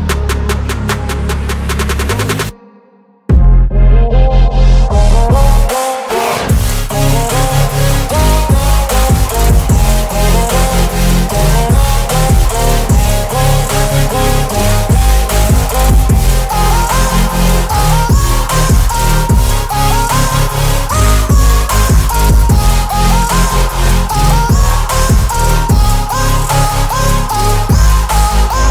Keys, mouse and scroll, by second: 0.9-3.7 alt+drag, 4.5 Return, 5.7 t, 7.5 click, 9.3 shift+i, 12.0-13.0 typing, 14.2 ctrl+a, 15.4-18.4 drag, 24.4-26.2 scroll down 1, 26.6-28.7 drag.